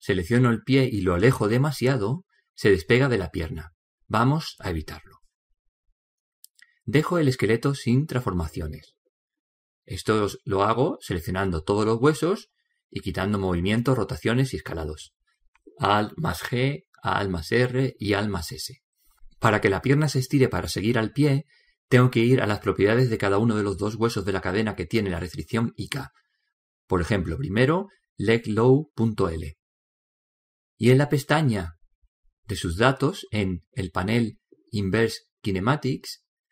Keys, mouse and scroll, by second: 0.3 click, 6.9-8.9 middle drag, 8.5 a, 8.9 a, 10.8 alt+g, 11.6 alt+r, 13.0 alt+s, 17.4-21.6 middle drag, 23.8 right click, 26.2-29.3 drag, 30.0 click, 34.1 click.